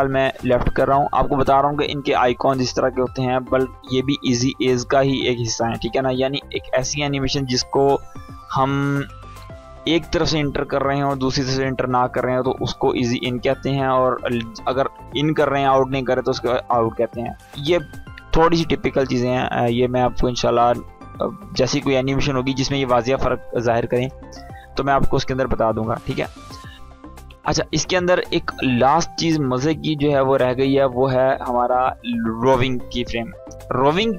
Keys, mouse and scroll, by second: 1.8-3.0 drag, 24.6 click, 27.2-27.5 click, 28.1-28.4 click.